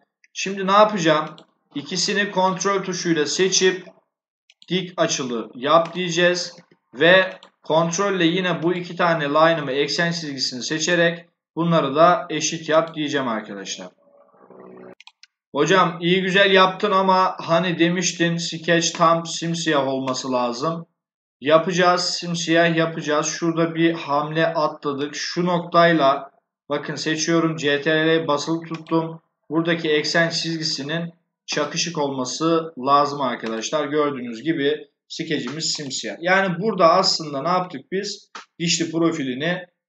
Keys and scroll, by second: 6.0 Escape.